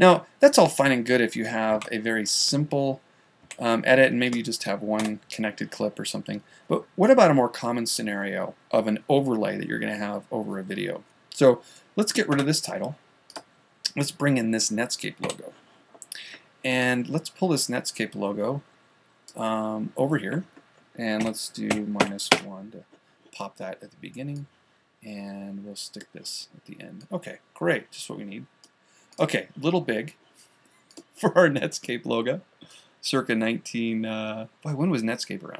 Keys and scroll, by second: 0.3 super+z, 4.0 a, 15.7 q, 22.8 ctrl+-.